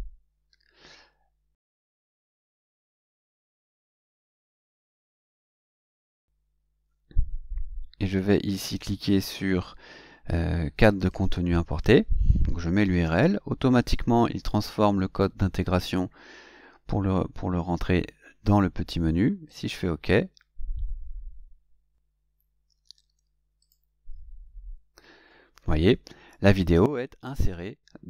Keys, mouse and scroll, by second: 2.3 click, 3.3-4.1 drag, 4.4 click, 5.7 Delete, 11.0 click, 12.9 ctrl+v, 19.3 click, 23.5 click.